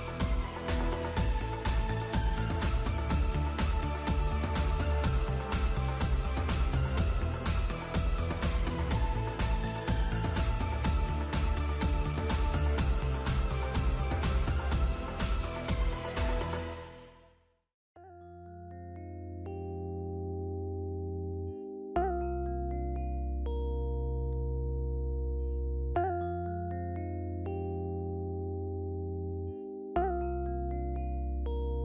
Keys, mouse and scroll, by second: 0.4 scroll down 4, 0.7 middle click, 4.8 click, 6.0 alt+a, 6.4 shift+middle click, 9.4 click, 10.9 click, 12.3 click, 14.2 click, 16.8 click, 17.9 click, 21.2 click, 24.9 z, 30.5 z.